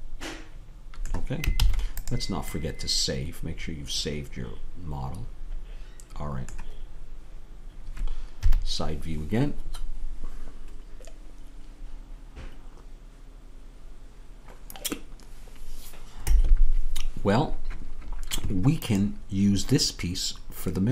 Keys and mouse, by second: 1.6 ctrl+s, 8.4 KP_3.